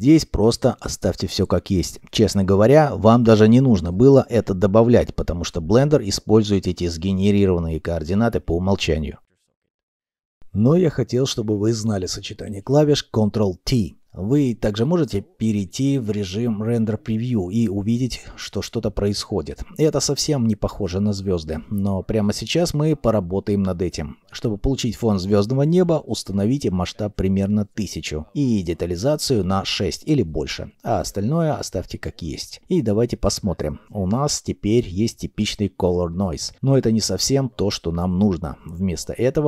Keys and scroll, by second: 28.5 1, 28.6 0, 29.1 Return, 29.7 6, 29.9 Return, 37.1 shift+a.